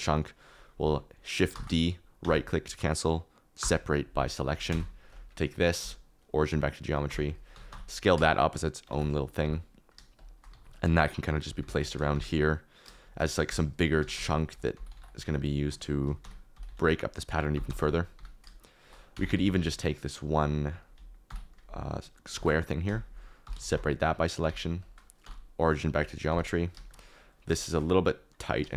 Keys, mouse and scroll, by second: 1.5 shift+d, 3.5 p, 4.7 Tab, 5.7 q, 7.0-9.4 typing, 7.2 click, 10.5 alt+d, 10.8-12.1 typing, 13.4-18.1 typing, 15.7 ctrl+z, 17.6 Return, 19.1 Tab, 19.3 1, 19.6 alt+z, 21.2 ctrl+l, 22.3 shift+d, 23.4 p, 23.7 Tab, 24.4 g, 25.2 q, 26.2 g, 26.7 shift+middle click, 27.1 click, 28.0 click, 28.4 click.